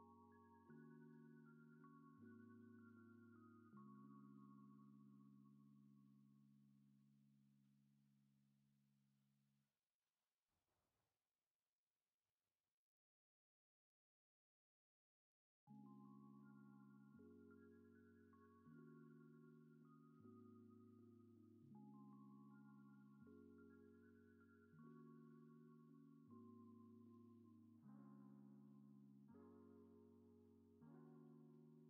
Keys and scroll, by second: 7.0 space, 10.6 ctrl+z, 15.2 space, 19.1 space, 29.1 space.